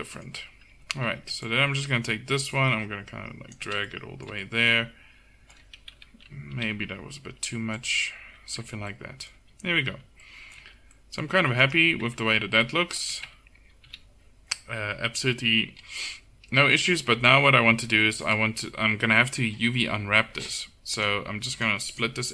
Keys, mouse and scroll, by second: 0.8 a, 1.1 a, 5.9 KP_1, 6.5 g, 8.6 Tab, 9.4 z, 9.9 z, 10.6 a, 11.6 click, 12.1 Tab, 12.2 click, 13.1 a, 13.3 a, 13.9 KP_7, 17.4 KP_1.